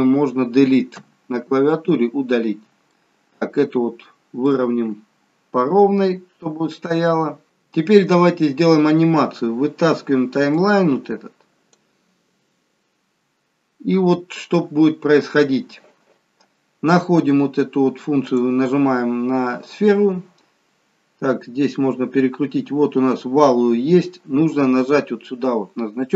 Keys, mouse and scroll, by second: 1.0 Delete, 3.0 shift+middle click, 5.5-5.9 scroll down 2, 6.1-7.2 scroll up 1, 10.8 click, 12.9-13.8 scroll down 4, 13.8 scroll down 2, 13.9-14.3 scroll up 1, 15.2 scroll up 3, 18.4 click, 21.5-23.1 scroll down 2.